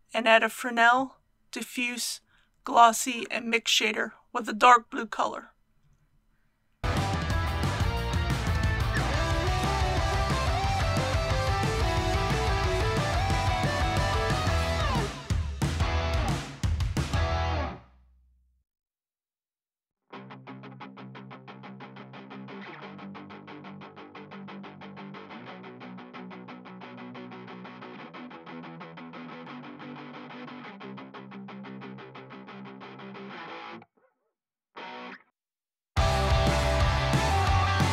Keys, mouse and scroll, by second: 1.0-4.8 drag, 17.9 click, 25.5-37.9 drag.